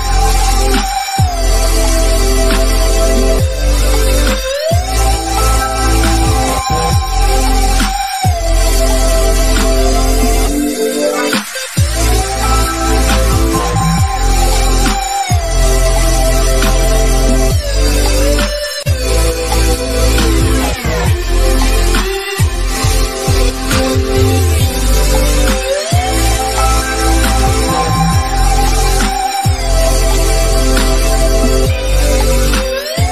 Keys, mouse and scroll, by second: 4.5 click, 5.7 scroll up 1, 7.7 click, 11.5 click, 14.7 click, 18.8 click, 21.0 click, 25.4 click, 27.3 click, 29.3 click, 31.8-32.5 scroll down 2, 32.1 click, 32.5 shift+middle click, 33.0 click.